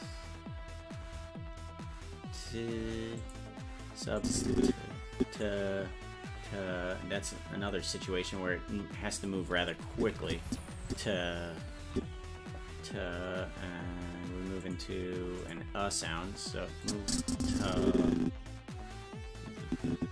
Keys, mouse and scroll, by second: 4.2-5.4 drag, 10.0 Left, 10.9 Right, 12.0 Right, 14.6 click, 15.4 click, 16.8-20.1 drag.